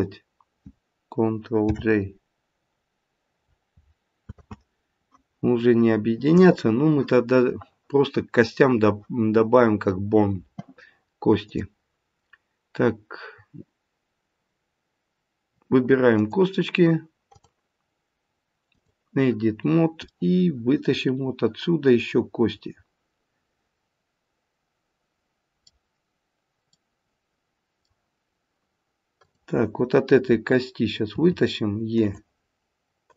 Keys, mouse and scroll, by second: 1.6 ctrl+j, 4.3 ctrl+z, 11.5 click, 16.1 click, 17.3 click, 19.4-20.1 scroll up 1, 20.1 middle click, 20.1 scroll up 1, 25.1 middle click, 26.7 middle click, 29.2 click, 31.1 e, 33.0 click.